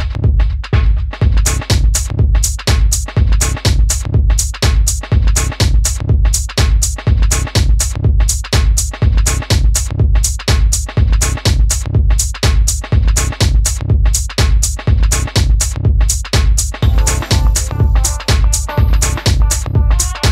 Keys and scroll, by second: 0.1 super+v, 17.9 super+c, 18.5 space, 19.9 super+space.